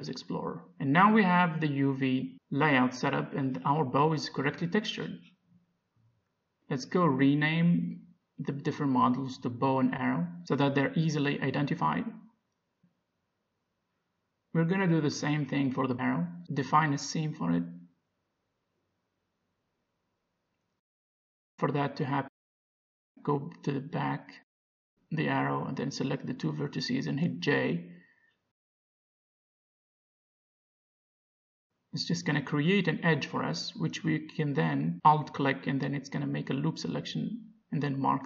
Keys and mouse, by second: 1.7-3.3 middle drag, 6.1-8.1 drag, 9.8 click, 11.7 r, 15.0 alt+h, 16.1 middle click, 16.6 Tab, 20.1 a, 23.6 click, 23.7-25.2 middle drag, 25.7-28.8 middle drag, 28.5 j, 29.8 a, 30.8-32.4 drag, 32.6 ctrl+e, 33.7 a, 34.2 a, 35.5 u.